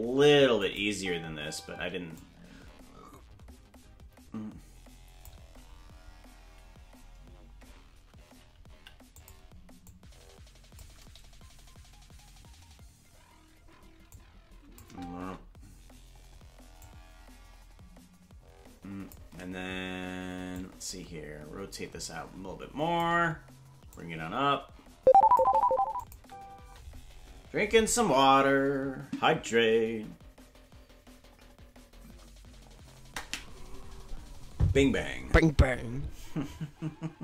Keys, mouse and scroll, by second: 0.6 click, 0.9 space, 2.2-5.3 drag, 2.2 space, 9.9 click, 9.9 i, 14.1 click, 14.8 space, 16.8-19.1 drag, 16.8 space, 20.5-23.0 drag, 23.9-25.4 drag, 26.0 click, 26.1 space, 26.7 space.